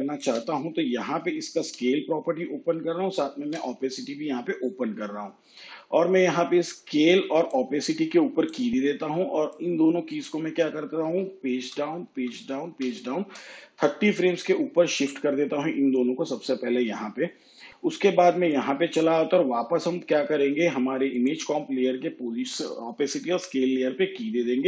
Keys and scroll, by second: 1.7 s, 3.7 shift+t, 11.6 shift+Page_Down.